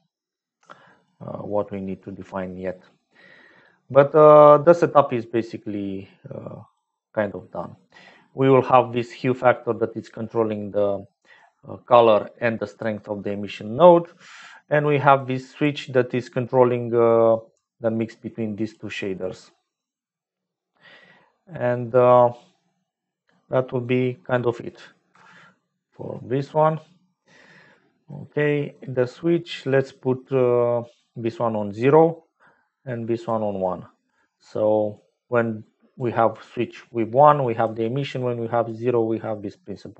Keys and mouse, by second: 2.7 click, 5.2-6.9 drag, 7.7 click, 7.7 right click, 8.6-10.0 drag, 11.2 click, 12.3 click, 14.0 middle click, 15.1 click, 15.9 middle click, 17.0-18.7 drag, 23.5 middle click, 25.1 Home, 27.2 middle click, 28.3 middle click, 29.4 middle click, 31.0 click, 32.9 click, 33.6 click, 34.9-35.9 drag, 37.3 click, 38.1 click.